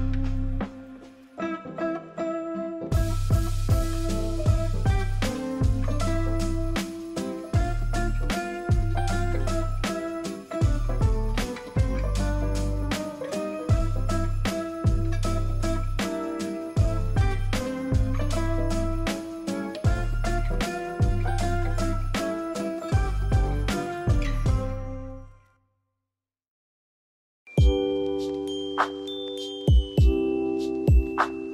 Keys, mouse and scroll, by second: 26.0 ctrl+s, 26.7 ctrl+0.